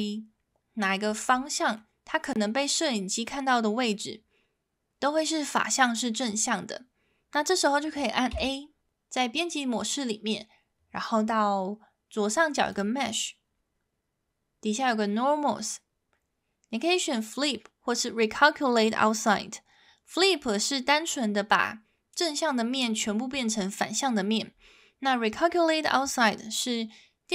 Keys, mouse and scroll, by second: 0.0-1.0 middle drag, 1.8-3.9 middle drag, 8.3 a, 12.8-27.3 drag.